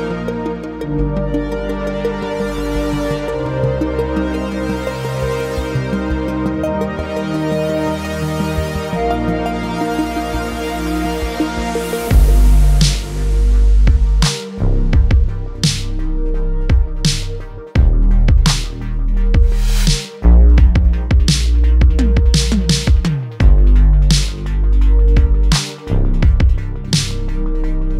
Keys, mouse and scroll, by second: 1.0 click, 1.6 click, 3.3 middle click, 4.1 shift+middle click, 4.8 scroll up 1, 5.8 ctrl+r, 10.3 click, 10.9 ctrl+r, 13.6 click, 15.1 ctrl+b, 17.3 click, 18.9 s, 19.3 z, 23.5 click, 24.6 alt+e.